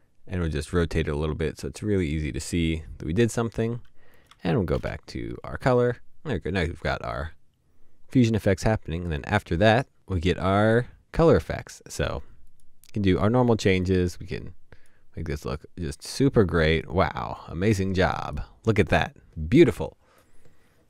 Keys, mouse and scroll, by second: 4.7 Up.